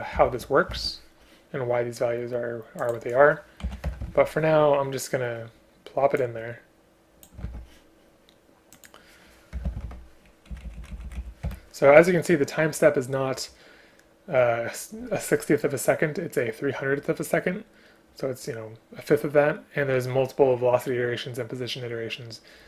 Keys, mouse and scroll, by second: 0.2 shift+Home, 0.8 ctrl+c, 3.7 End, 3.9 Return, 4.1 ctrl+v, 7.4 ctrl+c, 9.6 Return, 9.7 Return, 9.9 ctrl+v, 10.5 Up, 10.7 Up, 10.9 Up, 11.5 Delete.